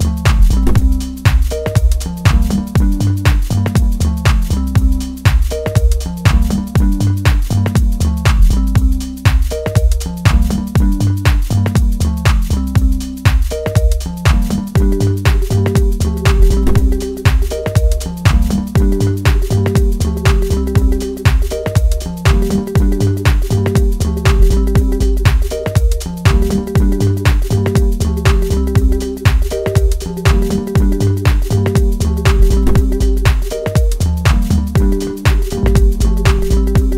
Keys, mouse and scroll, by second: 0.3 click, 3.7-4.6 scroll up 2, 4.6 click, 5.7 click, 9.7-27.8 drag, 27.8 shift+middle click, 28.4-29.1 scroll up 1, 29.1 shift+scroll up 1, 29.3-30.7 shift+middle drag, 30.7-36.9 drag.